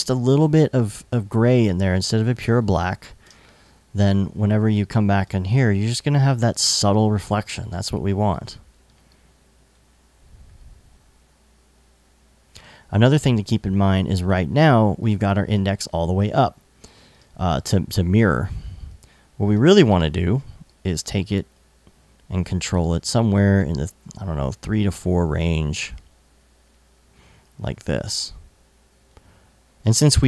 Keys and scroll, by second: 2.8 super+Tab.